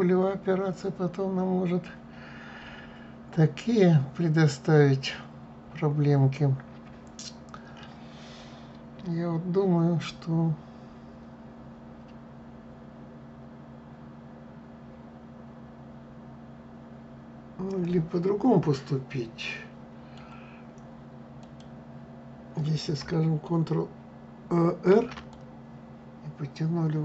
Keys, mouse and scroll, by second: 21.1 click, 24.6 ctrl+r.